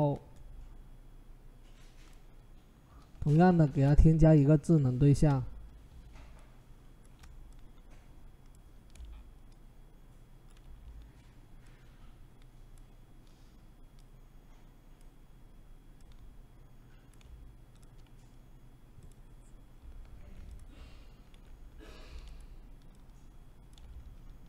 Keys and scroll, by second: 3.4 ctrl+shift+z, 4.9 ctrl+t.